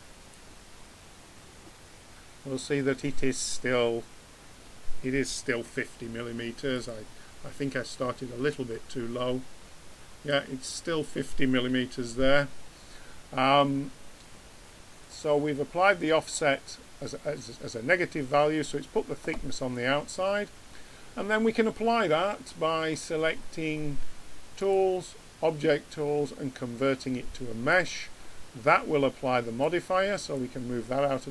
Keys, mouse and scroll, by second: 15.4-17.0 middle drag, 20.4-24.5 middle drag, 24.5-26.3 drag, 29.6-31.3 drag.